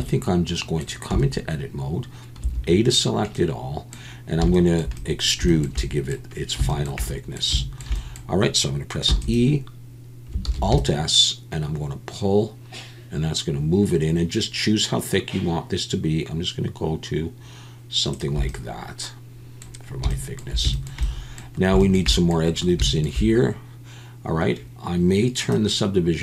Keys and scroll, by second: 1.1 Tab, 2.4 a, 9.2 e, 10.5 alt+s.